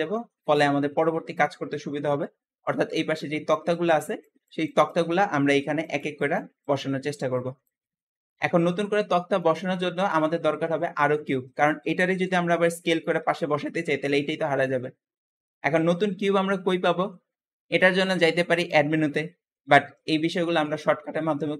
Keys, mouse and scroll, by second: 0.4-0.8 scroll down 3, 0.8-2.1 shift+middle drag, 2.1-4.1 scroll up 2, 4.1-7.9 scroll up 1, 8.1 scroll down 1, 8.3-8.7 shift+middle drag, 8.7-9.2 scroll up 3, 9.2-10.5 shift+middle drag, 10.5-10.8 scroll up 1, 10.8-11.3 shift+middle drag, 11.3-11.7 scroll up 1, 11.7 s, 14.5 scroll down 2, 15.3-18.3 shift+middle drag, 18.4 click.